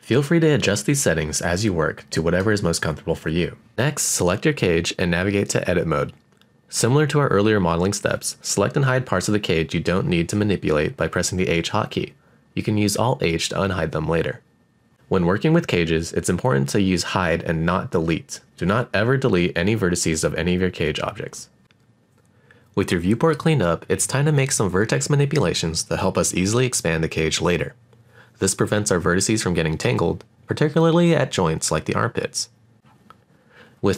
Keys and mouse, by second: 2.5-3.6 drag, 5.1 shift+middle click, 5.6 shift+middle click, 6.2 middle click, 6.8 middle click, 7.0 shift+middle click, 7.5 middle click, 7.8 click, 8.5 shift+middle click, 8.9 middle click, 9.3 alt+click, 9.9 click, 10.4 middle click, 11.2 h, 11.7 middle click, 12.0 middle click, 12.3 shift+middle click, 13.0 click, 13.4 shift+click, 13.5 shift+click, 14.1 shift+click, 14.6 shift+click, 15.0 shift+click, 15.1 shift+click, 15.5 shift+click, 16.3 click, 17.0 shift+click, 18.2 h, 18.7 middle click, 19.5 click, 20.0 shift+click, 20.3 h, 20.6 shift+middle click, 21.1 click, 21.6 shift+click, 22.0 shift+click, 22.3 shift+click, 22.6 h, 23.1 middle click, 28.8 alt+click, 30.5 alt+shift+click, 31.5 alt+shift+click, 32.1 g, 33.4 right click.